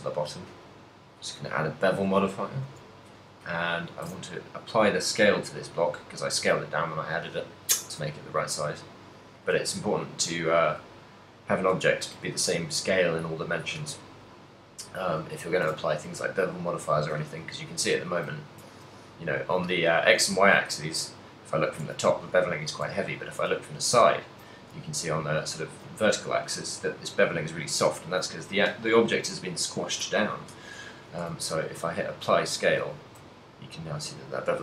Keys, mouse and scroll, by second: 1.8 middle click, 2.9 click, 4.3 ctrl+a, 10.5 middle click, 11.2 middle click, 11.4 middle click, 15.8 ctrl+a, 17.6 shift+middle click, 18.0 ctrl+middle click, 18.6 KP_0, 19.0 KP_1, 19.7 KP_7, 20.6 z, 22.9 KP_1, 23.9 a, 25.4 ctrl+middle click, 28.2 right click, 31.2 ctrl+a, 33.1 shift+middle click, 33.8 middle click, 33.8 z.